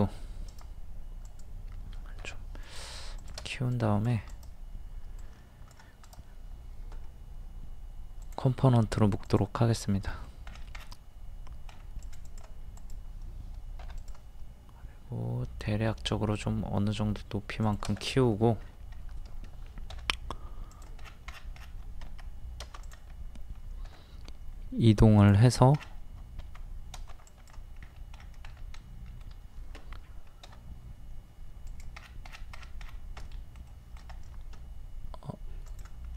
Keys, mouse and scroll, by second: 0.5 right click, 1.3 click, 4.3 right click, 5.2 click, 6.1 right click, 8.2 click, 10.1 middle click, 10.2 scroll down 1, 11.7-12.0 scroll up 1, 12.0 click, 13.8 p, 14.0 click, 15.0 click, 18.1 middle click, 18.6-18.9 scroll up 1, 19.9 typing, 20.7 click, 21.0-21.6 scroll down 1, 21.6-22.0 scroll up 1, 22.0 scroll down 1, 22.1 Escape, 22.8 click, 23.9 m, 25.2 click, 25.5-26.0 scroll down 1, 26.4 Escape, 27.3 click, 27.8-28.2 scroll up 1, 28.8 middle click, 30.4 m, 31.7 click, 32.0-32.5 scroll down 1, 33.3-34.9 shift+middle drag, 35.7 click.